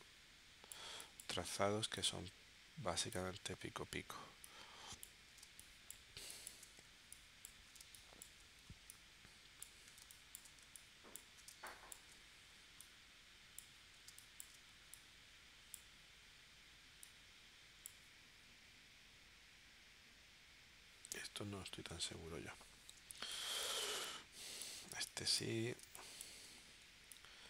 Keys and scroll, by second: 5.6 space, 7.8 space, 10.1 space, 11.5 space, 14.1 space, 23.1 space, 25.8 space.